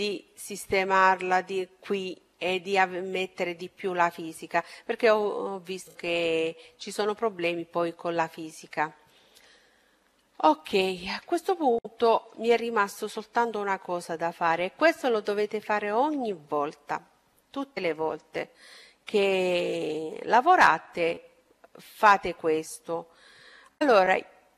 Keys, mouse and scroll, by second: 8.7-13.8 middle drag, 17.2-19.1 right drag, 18.3-20.4 middle drag, 19.6-21.4 right drag, 20.7 middle click.